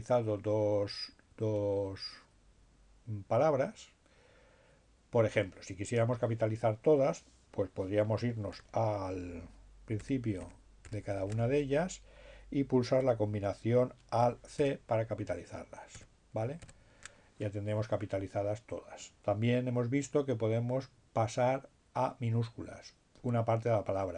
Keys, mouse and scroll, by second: 0.6 Left, 7.7 alt+b, 12.3 alt+c, 15.8 c, 16.1 c, 20.1 Right, 22.1 Right.